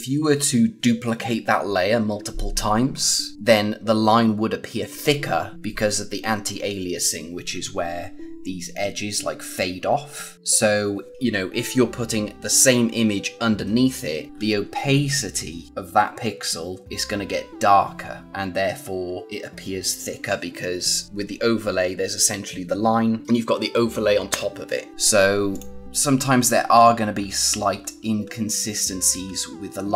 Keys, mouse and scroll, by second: 7.9 scroll up 1, 14.3 scroll up 1, 18.5-18.9 scroll down 1, 25.5 click, 25.9-26.7 scroll down 1, 26.7-27.7 scroll up 1, 27.7-29.0 scroll down 1, 29.0-29.9 scroll up 1.